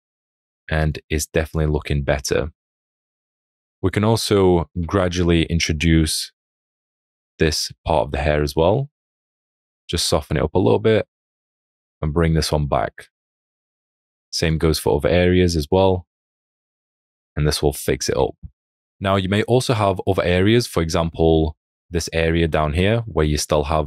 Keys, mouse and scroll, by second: 4.7 p, 7.5 [, 18.4 alt+scroll, 19.0 alt+scroll, 20.8 space, 21.0 click, 22.7 alt+scroll.